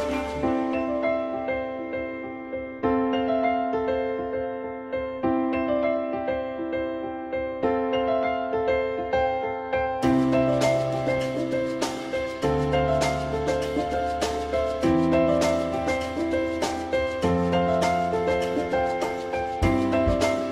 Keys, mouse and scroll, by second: 3.4 alt+middle click, 8.2 alt+middle click, 13.9 alt+middle click.